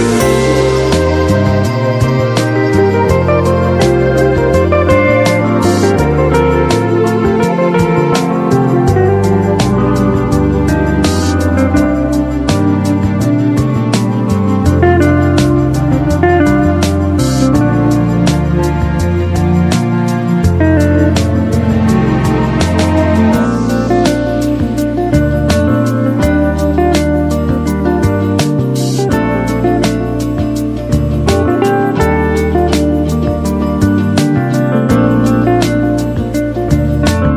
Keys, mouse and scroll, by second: 0.7-4.7 drag, 10.6-14.7 drag, 29.3 click.